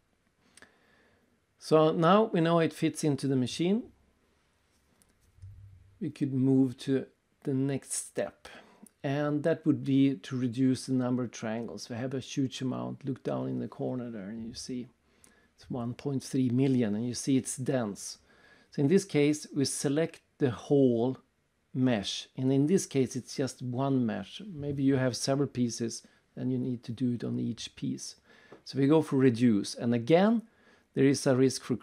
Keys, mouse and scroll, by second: 0.7 click, 2.1 click, 2.7 click, 3.1 click, 3.6 right click, 4.1 middle click, 4.4 right click, 5.5-5.9 scroll up 3, 5.9 middle click, 6.4 right click, 11.2-11.6 scroll up 3, 11.7 click, 11.9 right click, 12.5 middle click, 13.1-13.5 scroll up 3, 13.5 right click, 14.1-14.5 scroll up 3, 14.8 w, 16.1 click, 17.2 click, 17.8 click, 21.9 click, 27.8 click.